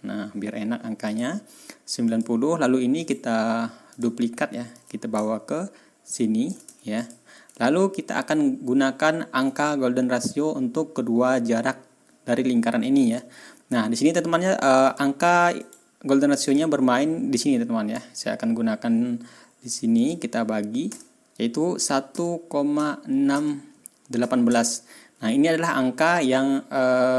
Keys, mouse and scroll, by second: 1.0 click, 2.0 click, 3.0 right click, 3.9 click, 4.7-6.6 drag, 6.9 ctrl+click, 7.9 ctrl+scroll up 2, 8.4 ctrl+scroll down 2, 8.9 ctrl+scroll up 2, 13.2 ctrl+scroll down 2, 13.6 ctrl+scroll up 2, 14.8 click, 15.6 right click, 16.4 click, 17.3 click, 19.9 click, 20.9 KP_1, 22.1-24.4 typing.